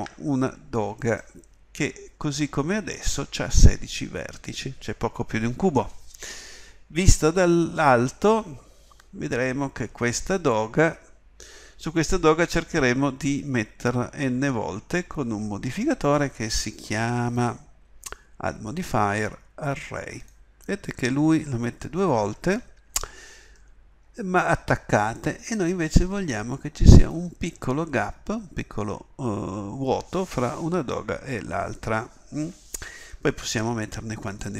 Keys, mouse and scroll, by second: 0.0 Tab, 7.1 KP_7, 9.0 middle click, 9.3-10.4 middle drag, 10.5-22.6 middle drag, 23.5-26.9 middle drag, 26.9-34.5 drag.